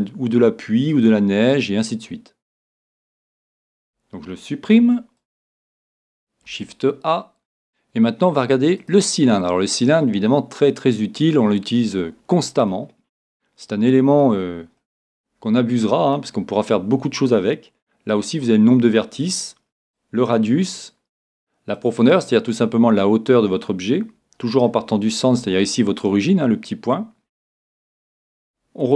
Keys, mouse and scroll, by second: 4.8 x, 6.5 shift+a, 9.6-11.9 middle drag, 12.2-14.7 middle drag, 14.8-16.7 middle drag, 19.9-23.7 drag, 25.5-27.6 middle drag, 28.2-28.9 middle drag, 28.8-28.9 drag.